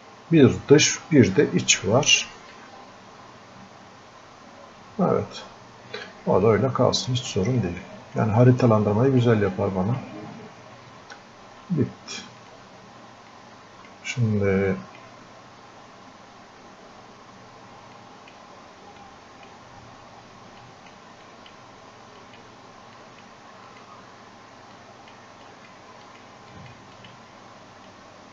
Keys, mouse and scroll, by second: 2.6-6.5 drag, 6.5-18.0 drag, 18.0 click, 19.1-20.7 drag, 24.8-28.3 drag.